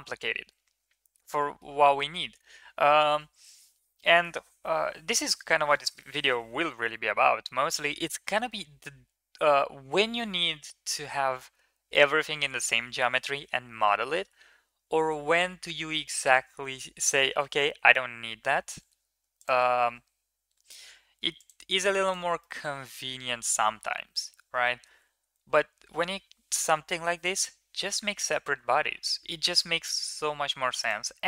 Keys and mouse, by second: 0.9 ctrl+z, 1.2 middle click, 1.9 Tab, 8.2 KP_1, 13.8 shift+middle drag, 15.7 middle drag, 16.4 Tab, 18.3 2, 20.5 shift+s, 21.7 Tab, 22.2 middle click, 23.0 KP_1, 24.5 shift+middle click, 25.2 ctrl+s, 28.2 shift+a.